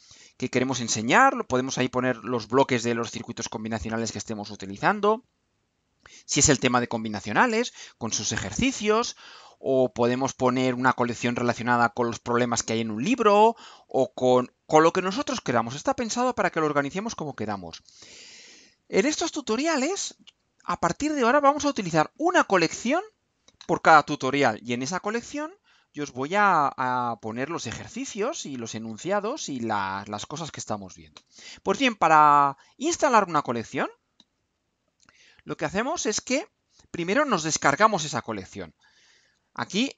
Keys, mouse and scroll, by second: 39.2 click.